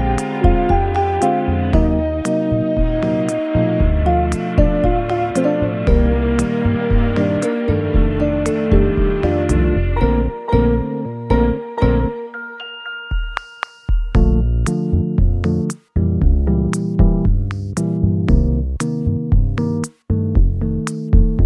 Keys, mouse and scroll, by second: 2.1-2.5 scroll down 1, 2.5 scroll up 1, 4.8 middle click, 8.6 shift+middle click, 8.6 scroll down 2, 8.9 middle click, 12.5 scroll down 1, 12.9 middle click, 14.4 Tab, 14.4-14.8 scroll down 2, 14.8 scroll up 2, 15.1 middle click, 19.7 n, 20.7-21.2 scroll down 3.